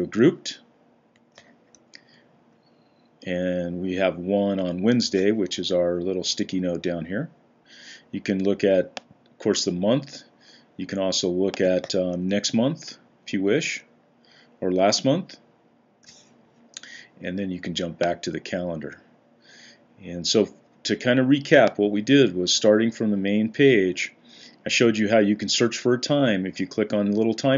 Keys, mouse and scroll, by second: 1.6 Down, 1.8-3.1 Down, 3.4 Down, 3.6 Down, 3.8 Down, 4.0 Down, 9.4 click, 9.9 click, 12.0 Down, 12.2-13.5 Down, 12.5 Down, 12.6 Down, 12.8 Down, 14.2 Up, 14.6-18.6 Up.